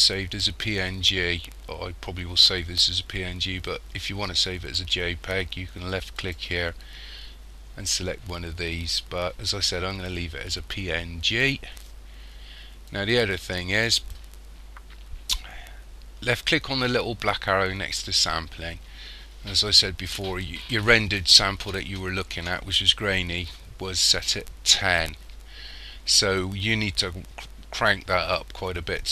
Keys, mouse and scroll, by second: 6.3 click, 13.0 click, 18.1 click.